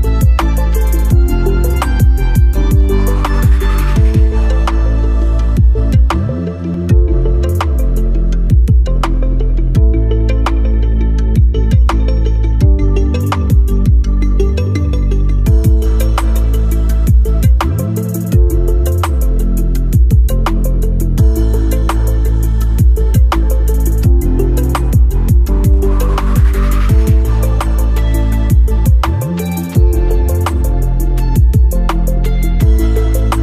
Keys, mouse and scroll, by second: 3.6 typing, 4.0-9.5 drag, 12.1 click, 12.3 alt+scroll up 1, 13.6-30.8 drag, 30.8-32.4 alt+middle drag, 32.4-33.4 drag.